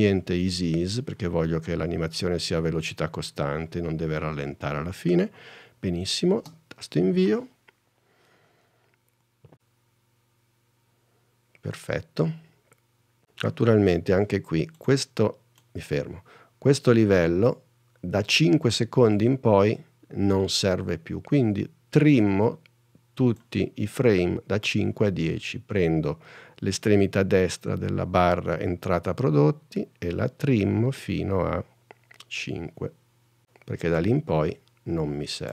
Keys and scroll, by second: 6.6 space.